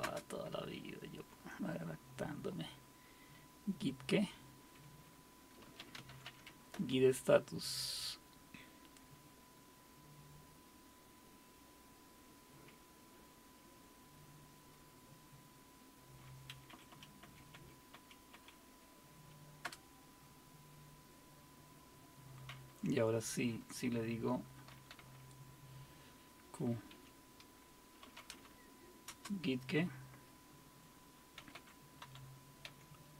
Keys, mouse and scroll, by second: 0.0-0.3 typing, 5.4-7.0 typing, 16.7 Up, 16.9 Up, 17.2 Up, 17.5 Up, 17.9 typing, 18.3 Up, 19.6 Return, 24.5-25.5 typing, 26.9-29.1 typing, 31.2-33.1 typing.